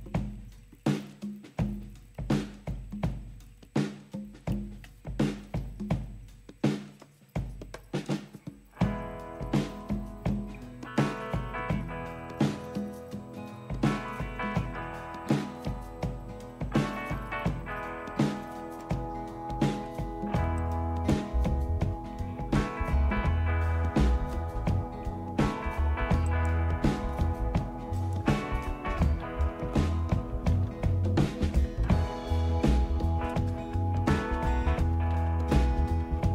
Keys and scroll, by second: 0.3 Down, 0.5 Up, 0.6 Return, 0.7 Down, 0.9 Return, 0.9-2.0 Down, 1.1 Return, 1.3 Up, 1.4 Up, 1.4 Return, 1.6 Down, 2.0 Up, 2.1 Return, 2.7 Return, 2.8-3.6 Down, 3.1 Return, 3.6 Up, 3.6 Return, 30.3-33.3 typing, 34.4-36.3 typing.